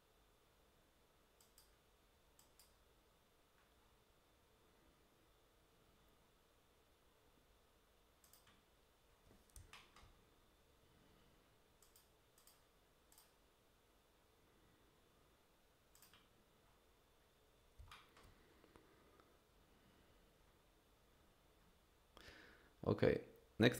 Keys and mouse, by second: 1.4 click, 2.4 click, 8.2 click, 9.7 shift+click, 11.8 click, 12.4 click, 13.1 click, 15.9 click, 17.9 shift+click.